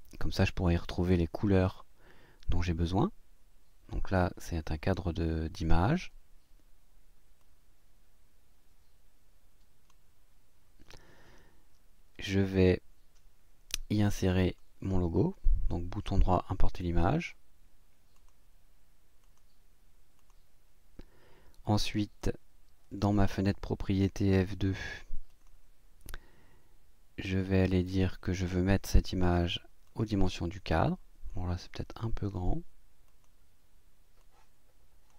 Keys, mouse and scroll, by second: 5.8 click, 7.4-10.1 drag, 14.5 click, 16.0 click, 18.1 click, 19.2 click, 20.2 click, 22.2-23.4 drag, 25.3 click, 29.8 click, 33.0 click, 34.2 click.